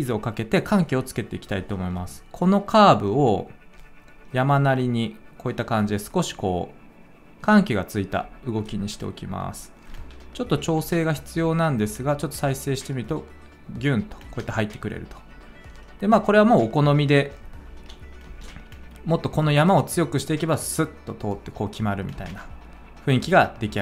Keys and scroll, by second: 10.8 space, 14.2 space, 18.2 space, 22.1 space.